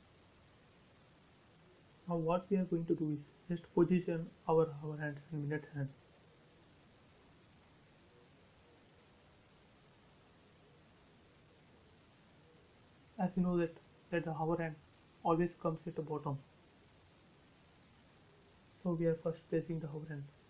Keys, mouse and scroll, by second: 0.9 shift+middle click, 1.4-3.1 scroll down 1, 4.3 shift+middle click, 4.4 shift+middle click, 4.8 scroll up 1, 5.4-6.0 scroll up 1, 7.0-7.7 scroll up 1, 8.1 scroll down 1, 9.3 middle click, 10.1-10.6 scroll up 1, 10.6 click, 13.0-13.7 scroll up 2, 16.2-17.9 scroll up 1, 17.9 m, 18.6 click, 18.9-19.6 scroll down 1.